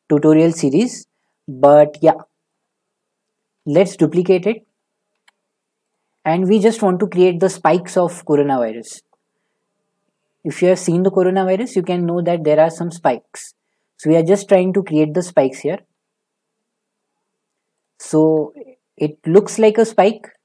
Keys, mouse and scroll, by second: 0.0 middle click, 2.5 shift+middle click, 3.6 d, 5.2 z, 6.0 click, 11.3 s, 11.7 z, 14.4 click, 15.9 s, 17.8 click, 18.4 g, 19.4 z, 20.3 click.